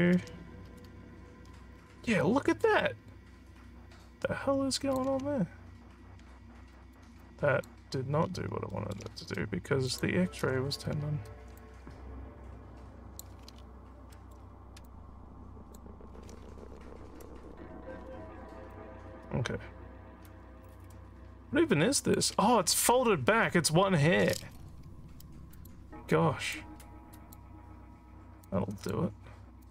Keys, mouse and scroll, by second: 1.8 alt+scroll down 1, 2.2-5.0 alt+drag, 6.7 alt+middle click, 7.2 alt+click, 8.3 alt+scroll down 1, 8.7 alt+middle click, 9.9 click, 11.6-13.1 alt+drag, 13.6 alt+scroll up 3, 14.2 alt+middle click, 14.8 click, 16.4 alt+scroll down 2, 16.5 scroll up 5, 18.3 scroll up 3, 18.8-22.2 alt+drag, 24.5 alt+scroll down 2, 25.6 click, 26.6 click, 28.5 click, 29.6 click.